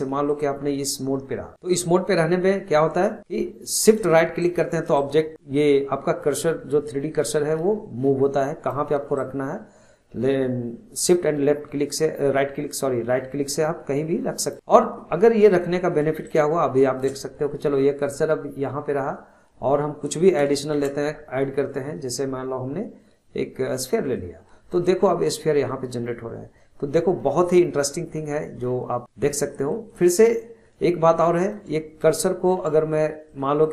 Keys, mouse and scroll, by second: 4.4-7.3 shift+right drag, 9.2-20.7 shift+right drag, 20.7 shift+a, 28.1-29.0 middle drag, 29.0 alt+scroll down 1, 29.2-29.7 middle drag, 30.2 alt+middle click, 30.6 scroll down 1, 31.0-31.7 shift+middle drag, 31.7-32.2 scroll down 1, 32.2-33.3 shift+middle drag, 33.3 click.